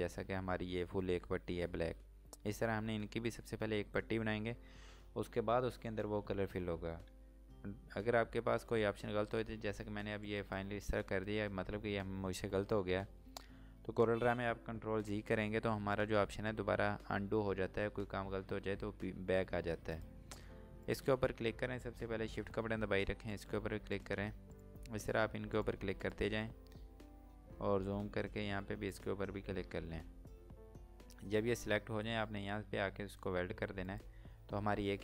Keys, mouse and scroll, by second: 7.1 click, 10.2 click, 14.9 ctrl+Num_Lock, 17.1 typing, 20.0 click, 24.0 shift+click, 24.6 shift+click, 25.1 shift+click, 25.6 shift+click, 26.1 shift+click, 26.8-27.3 shift+scroll up 2, 28.9 click, 29.6 scroll down 1, 33.8 scroll down 1, 33.9 click.